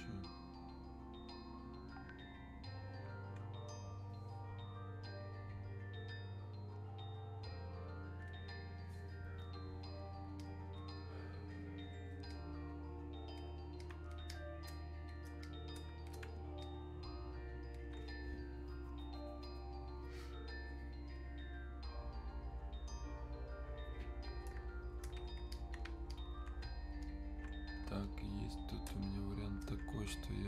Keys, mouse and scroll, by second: 8.3-20.2 drag, 21.2-25.6 drag.